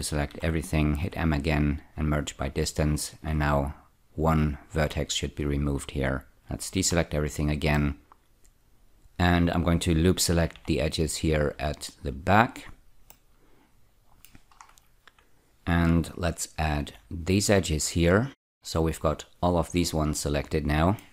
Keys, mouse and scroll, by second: 0.3 a, 1.0 m, 2.4 click, 6.7 a, 6.9 a, 7.8 middle click, 10.6 a, 11.8-13.1 scroll down 2, 13.1 middle click, 14.7-16.5 scroll up 1, 16.9 ä, 17.7-18.9 scroll down 4, 18.9-21.1 middle drag.